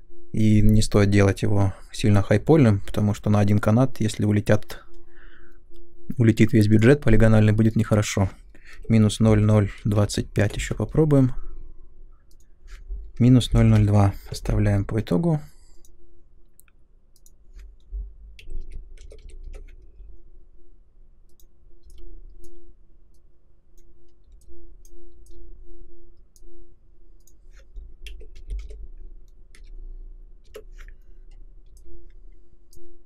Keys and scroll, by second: 8.4-10.4 typing, 12.9-14.3 typing, 18.1-19.5 typing, 27.8-30.0 typing, 30.5 Return.